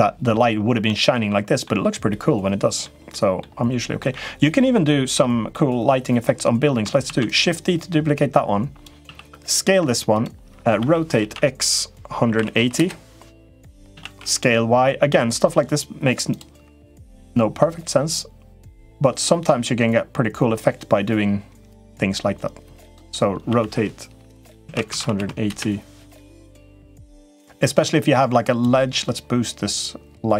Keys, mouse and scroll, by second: 0.6 middle click, 1.9 middle click, 3.0 middle click, 3.7 middle click, 4.5 middle click, 5.4 middle click, 6.9 shift+d, 8.0 click, 8.8 s, 11.0 r, 13.7 s, 17.1-22.7 drag, 23.2 r, 27.2-28.4 drag, 29.6-30.3 drag.